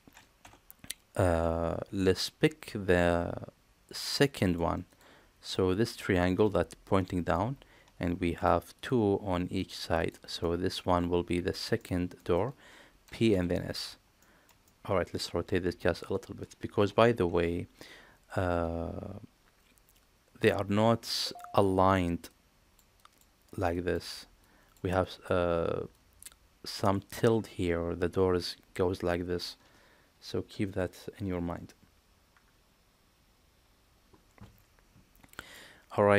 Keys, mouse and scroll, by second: 0.3 Tab, 2.1-4.5 middle drag, 4.8 click, 5.4-7.2 middle drag, 8.3 shift+click, 9.5 shift+click, 10.0 shift+click, 10.3-11.4 middle drag, 11.7 middle click, 13.0 p, 14.2 shift+middle click, 14.6 middle click.